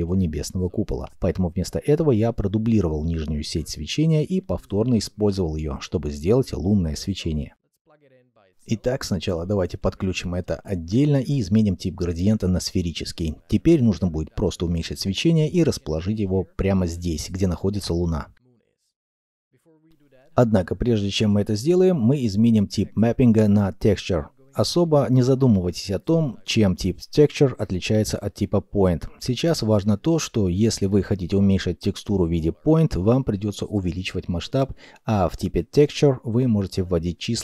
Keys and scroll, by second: 3.1 shift+d, 4.4 alt+p, 5.8 g, 21.7 Return, 21.7 1.